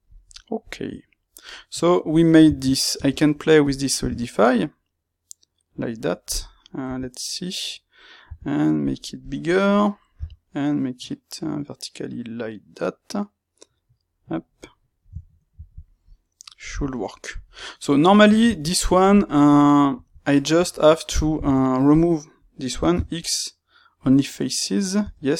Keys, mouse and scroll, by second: 0.8 Tab, 2.9 space, 6.0 middle click, 6.8 KP_3, 9.2 click, 10.0 g, 13.7 click, 14.3 middle click, 16.8-21.8 shift+middle drag, 21.3 Tab, 21.8-22.9 drag, 22.9 x, 25.0 Tab.